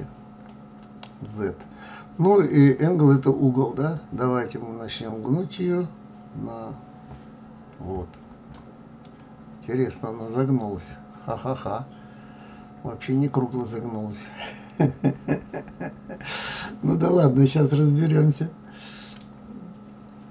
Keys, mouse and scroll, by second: 0.9-4.0 middle drag, 4.4 click, 9.5-12.5 middle drag.